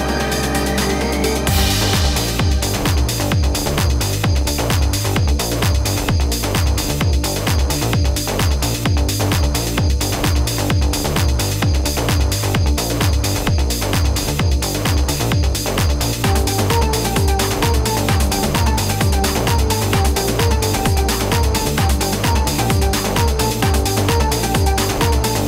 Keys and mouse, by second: 3.0 z, 3.9 space, 3.9 click, 4.0 space, 8.0 click, 10.0 Escape, 10.3 right click, 12.5 click, 15.7 click, 16.5 ctrl+=, 16.8 space, 16.9 click, 17.2 ctrl+=, 18.6 ctrl+z, 19.3 click, 23.0 ctrl+z, 24.6 ctrl+=.